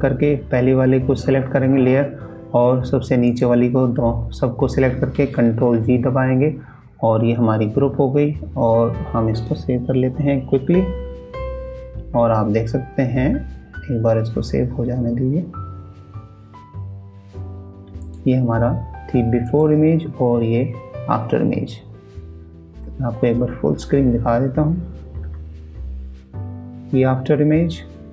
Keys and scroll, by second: 5.7 ctrl+g, 9.1 ctrl+s, 25.3 ctrl+KP_0.